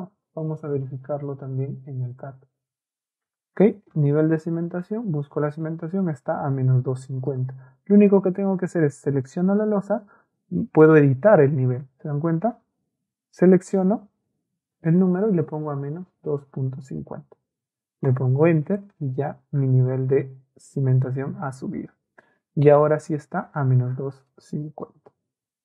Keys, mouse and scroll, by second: 7.3 click, 7.8 Escape, 8.1 Escape, 9.1 click, 13.5 click, 15.8 KP_Add, 16.3 KP_2, 16.7 KP_5, 18.1 Return, 19.1 Escape.